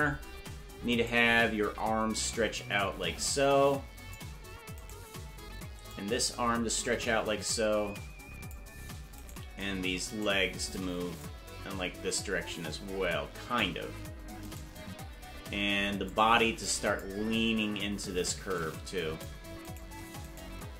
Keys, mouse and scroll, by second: 1.1 right click, 2.7-4.1 drag, 5.0 right click, 5.8-8.5 drag, 9.4 right click, 10.3 shift+right click, 11.1-13.6 drag, 14.7 right click, 16.0-17.0 drag, 18.5 click, 19.9 right click, 20.5 shift+right click.